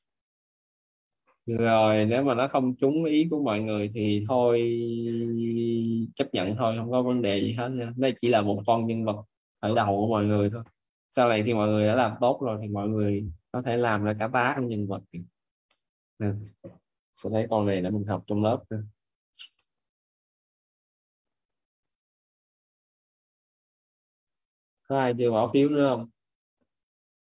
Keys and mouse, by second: 5.1 middle click, 10.9 middle click, 15.6 middle click, 19.4 middle click.